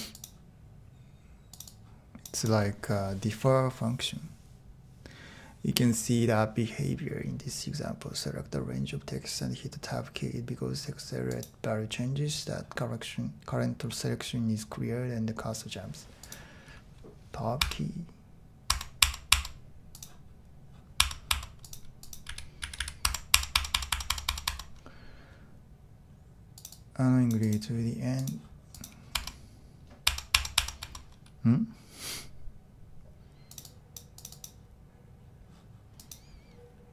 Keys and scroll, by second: 17.6 Tab, 18.7 Tab, 19.0 Tab, 19.3 Tab, 21.0 Tab, 21.3 Tab, 22.3 a, 22.6 a, 23.0 Tab, 23.5 Tab, 23.6 typing, 24.1-36.9 Tab.